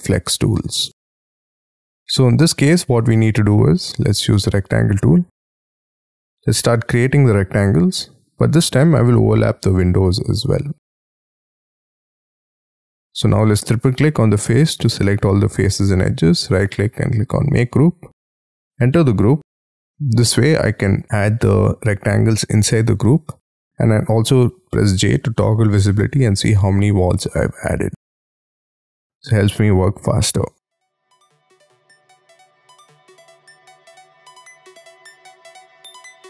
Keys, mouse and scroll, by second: 1.1 scroll up 4, 1.8 scroll down 4, 2.3-2.6 scroll up 3, 2.7-3.0 scroll down 1, 3.2-3.8 scroll up 8, 3.8 r, 4.3 scroll up 5, 5.3-5.8 scroll down 12, 5.9-7.4 scroll up 9, 7.4 scroll down 2, 8.6-9.9 scroll down 10, 9.9-11.4 scroll up 10, 11.4-12.2 scroll down 10, 12.2-13.1 scroll up 10, 13.1 scroll down 2, 13.2 double click, 13.3 double click, 15.1 scroll down 5, 15.6-16.4 scroll up 8, 16.4 right click, 18.8 double click, 19.9 j, 20.4-21.0 scroll up 7, 21.0 scroll down 10, 23.4 j, 25.0-27.0 typing, 27.8-28.3 scroll up 7, 29.7-30.1 scroll down 12, 30.5-31.4 scroll up 12, 31.4 scroll down 11, 31.8 scroll up 11, 32.5-32.9 scroll down 15, 32.9-34.5 scroll up 21, 34.5 scroll up 4, 34.8-35.1 scroll down 10, 35.2-35.8 scroll up 6, 35.8-36.2 scroll down 14.